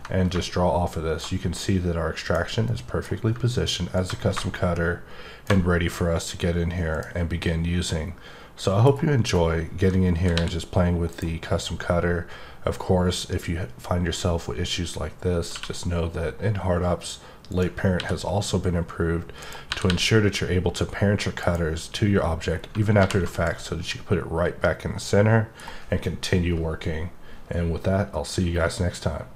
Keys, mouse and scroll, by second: 2.2 click, 2.6 middle click, 3.9-5.5 drag, 6.9 click, 7.4 middle click, 9.2-10.0 scroll down 1, 10.0-11.1 scroll up 1, 11.1 right click, 17.4 right click, 21.4 right click, 22.5-23.0 scroll down 3, 23.7 scroll down 1, 23.8 scroll up 1, 23.9 middle click, 24.1 scroll down 1, 25.6 scroll up 1.